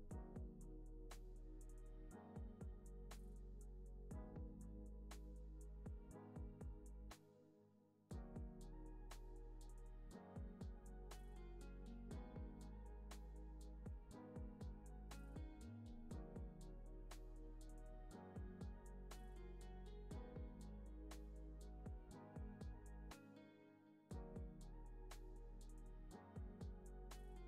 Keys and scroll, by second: 1.6 z, 2.0 x, 4.1 shift+r, 6.4 u, 7.2 shift+r, 8.9 y, 10.4 v, 11.2 u, 14.1 z, 15.1 x, 24.5 z, 26.4 x.